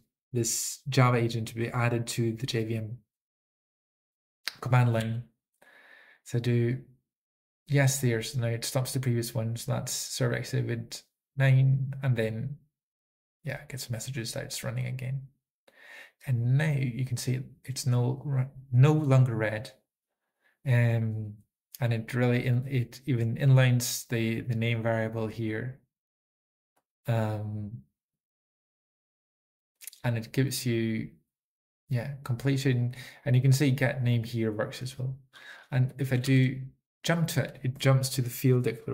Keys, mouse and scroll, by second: 1.8 typing, 5.8 y, 11.8 typing, 26.9 click, 32.8 click, 33.4-34.4 typing, 34.3 click, 37.8-38.2 typing.